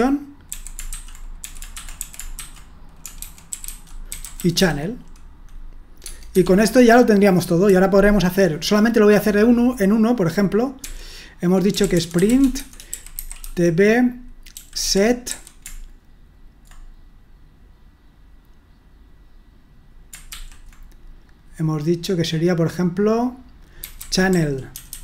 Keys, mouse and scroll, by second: 0.0-5.0 typing, 6.1 Tab, 6.3 Escape, 6.7-15.8 typing, 23.8-25.0 typing.